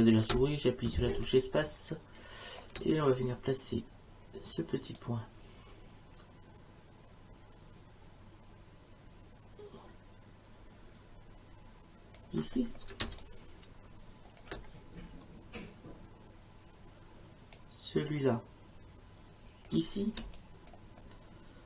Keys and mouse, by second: 0.3 space, 1.2 click, 2.6 space, 5.0 click, 13.0 space, 13.2 click, 14.4 space, 17.6 click, 20.2 space, 20.4 click.